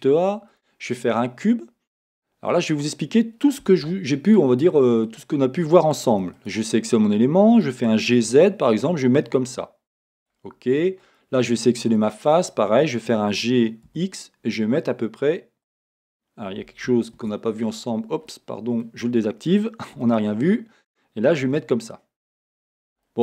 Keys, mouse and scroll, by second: 1.4-3.6 middle drag, 3.6 Tab, 4.3 right click, 5.1 click, 6.1 3, 6.4 click, 7.6 middle click, 10.3-12.0 drag, 12.0-15.6 middle drag, 13.3 g, 15.8 click, 17.2 shift+Tab, 18.3 Tab, 18.3-22.6 middle drag, 19.9 g, 22.8 click, 23.0-23.2 middle drag.